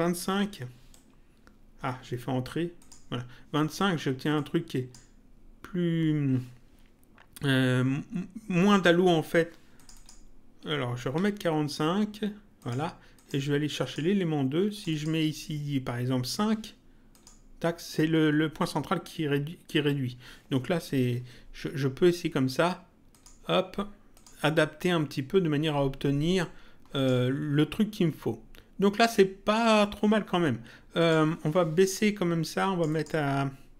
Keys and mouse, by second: 0.9 Return, 2.8 click, 4.3 click, 9.7 click, 12.6 click, 17.1 click, 23.1 click, 27.0 click, 31.0 click, 32.6 click.